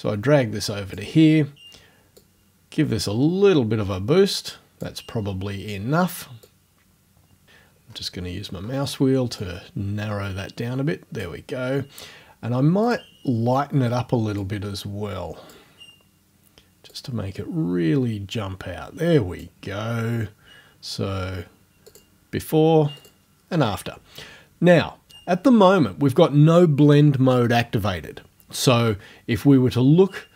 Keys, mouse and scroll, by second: 2.2-5.0 drag, 6.5 click, 7.9-8.5 scroll up 1, 9.4-11.4 drag, 12.9 click, 14.5-15.7 drag, 17.0-19.6 drag, 21.9 click, 23.0 click.